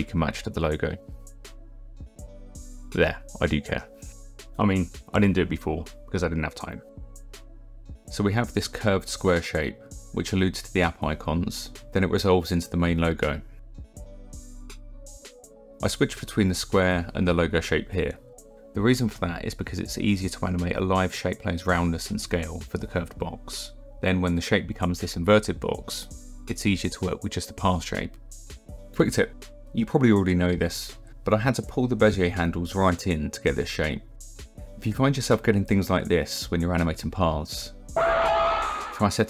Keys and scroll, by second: 8.3 KP_0.